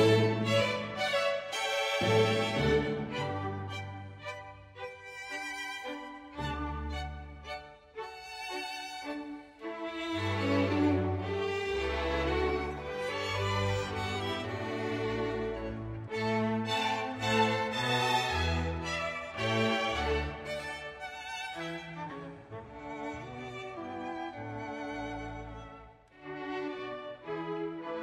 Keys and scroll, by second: 0.0 Page_Down, 0.2 Page_Down, 0.4 Page_Down, 0.6 Page_Up, 0.8 Page_Down, 1.2 Page_Down, 1.4 Page_Down, 1.9 Page_Up, 2.0 Page_Down, 2.1 Page_Up, 2.2 Page_Down, 2.3 Page_Down, 2.6 Page_Down, 2.8 Page_Down, 3.1 Page_Down, 3.4 Page_Down, 3.8 Page_Down, 4.1 Page_Down, 4.6 Page_Down, 4.9 Page_Up, 5.0 Page_Down, 5.2 Page_Up, 5.2 Page_Down, 5.5 Page_Up, 5.6 Page_Down, 5.9 Page_Up, 6.0 Page_Down, 6.3 Page_Up, 6.4 Page_Down, 6.7 Page_Down, 6.9 Page_Down, 7.3 Page_Down, 7.9 Page_Down, 8.7 Page_Down, 9.3 Page_Down, 9.8 Page_Down, 9.9 Page_Up, 10.0 Page_Down, 10.8 Page_Down, 12.0 Page_Down, 12.1 Page_Up, 12.2 Page_Down, 12.3 Page_Up, 12.5 Page_Up, 12.8 Page_Up, 13.3 ctrl+z, 13.7 Page_Down, 14.0 Page_Up, 14.4 ctrl+s, 14.9 space, 18.7 space, 19.0 space, 19.2 space, 19.7 ctrl+s, 20.1 space, 22.6 Page_Down, 23.0 Page_Down, 23.5 Page_Down, 23.9 Page_Down, 24.3 Page_Down, 24.7 Page_Down, 25.1 Page_Down, 25.5 Page_Down, 25.9 Page_Down, 26.3 Page_Down, 26.7 Page_Down, 27.1 Page_Down, 27.5 Page_Down, 27.9 Page_Down.